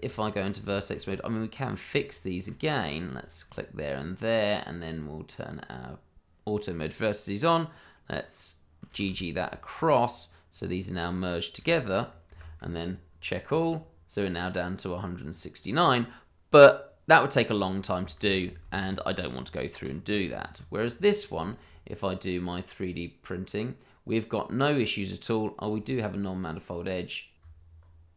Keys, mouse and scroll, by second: 0.3 scroll up 1, 0.7 shift+middle click, 1.0 scroll up 1, 1.6 click, 1.9 shift+click, 2.0 click, 3.2 shift+click, 3.7 middle click, 5.2 click, 8.9 g, 9.7 click, 11.6 g, 12.3 Escape, 13.4 click, 15.2-17.0 scroll down 1, 17.3 middle click, 18.2 ctrl+z, 19.2 scroll down 1, 19.8 Tab, 19.9 scroll down 1, 20.2 shift+middle click, 20.7 click, 21.0 middle click, 21.5 shift+middle click, 21.8-22.5 scroll up 1, 22.5 click, 25.8 shift+middle click, 27.8 Tab.